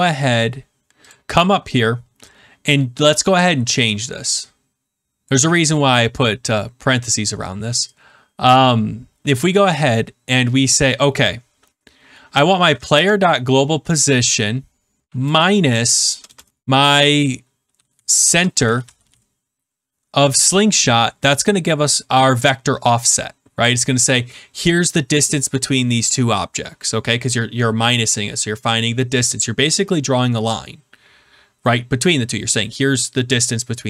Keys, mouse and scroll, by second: 1.0 click, 5.2 click, 5.6 click, 10.7 click, 12.9 Right, 13.5-14.0 Right, 15.0 BackSpace, 16.0 BackSpace, 16.2 BackSpace, 17.7-19.5 typing, 20.3 Return.